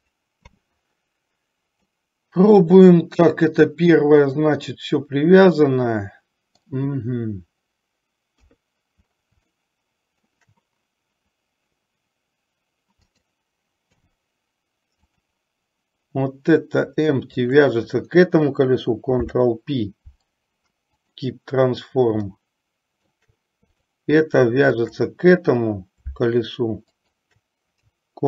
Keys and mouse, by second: 2.1-7.0 middle drag, 8.5 KP_3, 9.8-10.7 shift+middle drag, 13.3 click, 14.2 h, 15.3 click, 17.6 shift+click, 19.2 ctrl+p, 22.5-23.4 shift+middle drag, 27.3 shift+click.